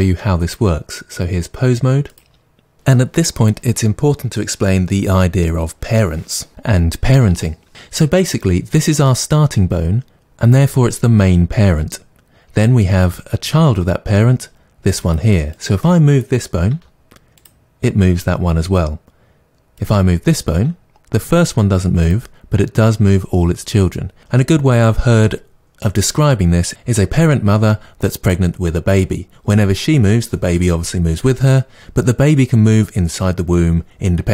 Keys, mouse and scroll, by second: 15.0 click, 15.5 click, 16.7 r, 17.4 click, 19.8 click, 20.5 r, 22.1 click.